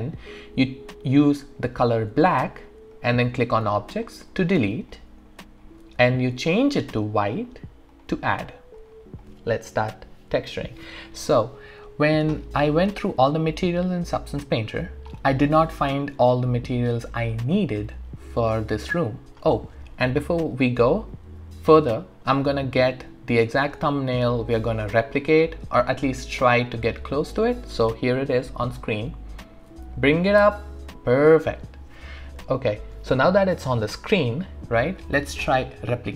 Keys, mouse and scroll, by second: 2.3 click, 2.3 typing, 3.9 click, 4.9-7.9 alt+drag, 13.0 click, 14.6-15.1 scroll down 1, 15.1-17.1 scroll up 1.